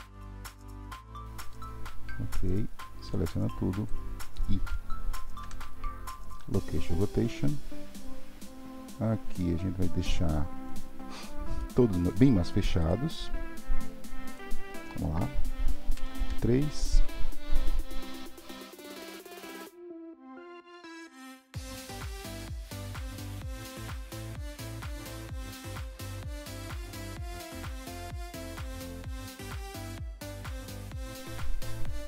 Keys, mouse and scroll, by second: 3.1-5.4 drag, 5.4 i, 8.1-11.1 drag, 11.6-12.8 middle drag, 12.8 click, 14.3 click, 18.1 r, 19.4 click, 19.5 r, 20.1 click, 20.2 r, 20.9 click, 21.0 r, 22.1 middle click, 22.4 click, 22.7 KP_3, 23.3 r, 24.1 click, 24.2 r, 25.2 click, 25.4-30.0 typing, 26.0 click, 26.6 click, 27.5 click, 28.2 click, 28.7 click, 29.4 click, 30.0 click, 30.9-32.0 middle drag.